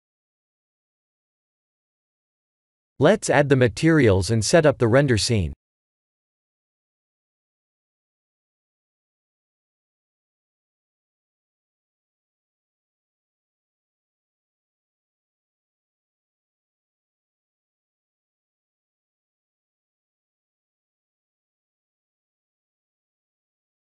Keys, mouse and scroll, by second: 0.8 click, 2.4 click, 3.1 click, 3.9 click, 6.9 click, 8.8 click, 9.5 click, 11.1 click, 12.3 shift+click, 13.3 shift+click, 14.0 shift+click, 15.2 click, 16.4 click, 17.6 click, 17.8 Tab, 18.3 shift+middle click, 19.3 shift+z, 19.6 middle click, 20.2 click, 20.4 b, 23.0 click.